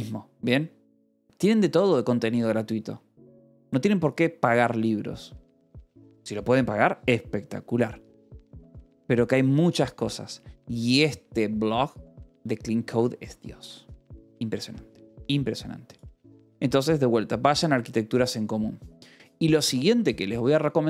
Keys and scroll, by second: 20.5-20.8 typing.